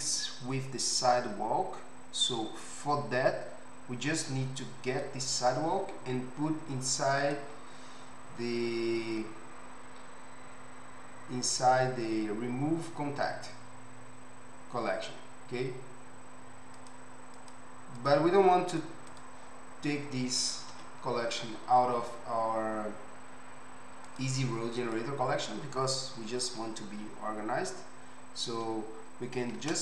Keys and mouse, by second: 5.1-16.9 middle drag, 16.9 click, 17.0 middle click, 17.3 click, 17.6-19.2 middle drag, 19.2 click, 20.7 KP_Decimal, 24.1 click, 24.8 click.